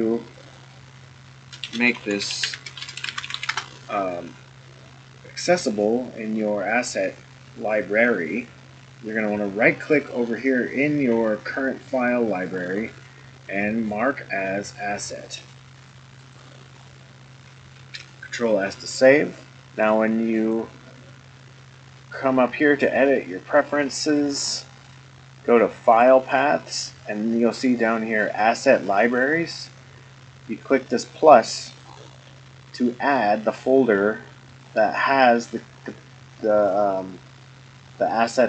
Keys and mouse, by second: 0.4-4.4 drag, 2.0 o, 9.9 click, 12.5-16.3 right drag, 17.8 ctrl+s, 20.4-24.3 drag.